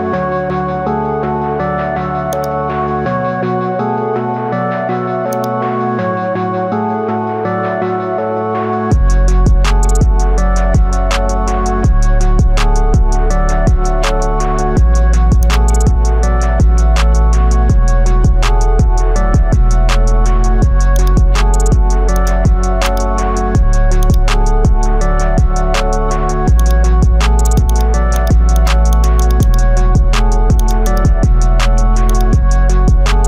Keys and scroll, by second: 4.5 ctrl+z, 8.2 ctrl+i, 18.2 ctrl+z.